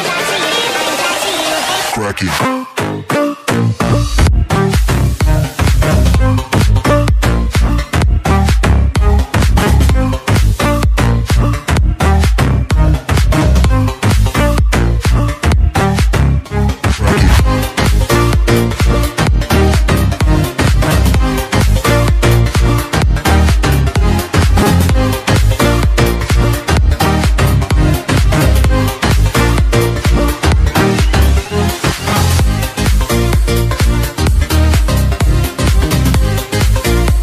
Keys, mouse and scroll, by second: 0.6 click, 1.9 right click, 2.7 click, 9.2 click, 15.1 ctrl+s, 19.2 ctrl+shift+s, 20.4 click, 21.9 ctrl+shift+s, 23.3 click, 29.4 click.